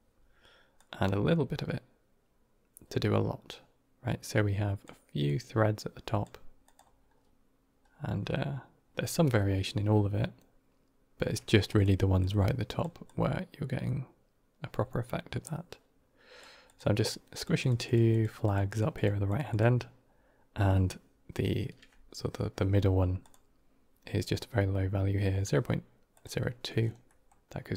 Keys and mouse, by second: 0.6-4.7 drag, 5.1 click, 6.5 click, 12.1 click, 12.9-16.3 drag, 16.5 click, 16.9 click, 17.2 click, 17.5 click, 17.7 click, 18.0 click, 18.3 click, 18.6 click, 18.8 click, 19.1 click, 19.4 click, 23.1 click, 26.0 click, 26.9 middle click.